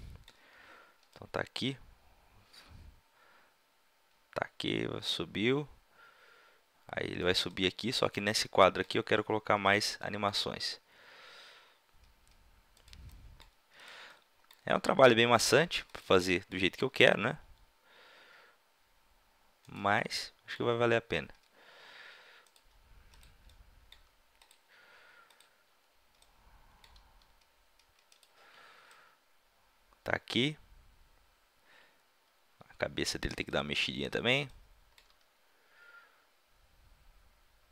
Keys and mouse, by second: 0.0-1.6 middle drag, 1.6-2.8 drag, 3.0 middle click, 7.6-9.7 middle drag, 9.7-11.5 drag, 10.4 r, 13.8-14.8 middle drag, 14.8 r, 15.7 middle click, 15.9-16.2 drag, 16.8 r, 19.7-21.7 drag, 21.1 r, 22.5 drag, 23.1-24.3 drag, 23.1-24.3 right drag, 23.9 r, 27.2 g, 30.4 click, 33.6-37.7 middle drag, 35.1 r.